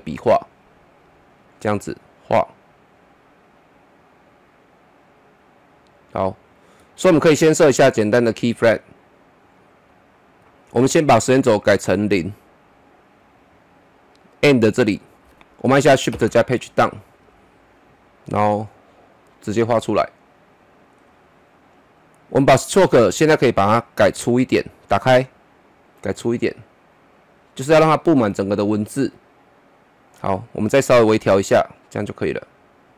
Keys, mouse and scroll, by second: 13.1 click, 16.1 shift+Page_Down, 18.3-22.4 drag, 22.6 double click, 24.7-32.9 drag.